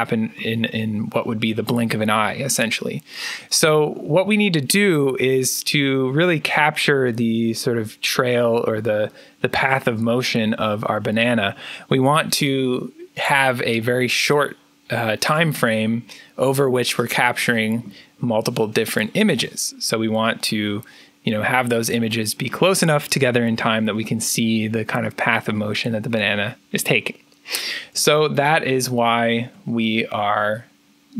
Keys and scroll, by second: 28.9 alt+Tab.